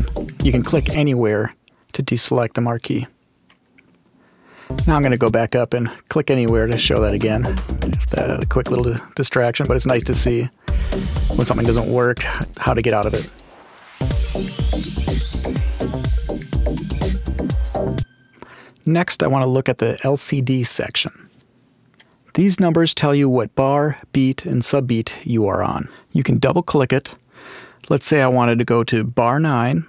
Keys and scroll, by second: 4.6 space, 6.4 space, 8.7 space, 17.8 space, 29.7 9.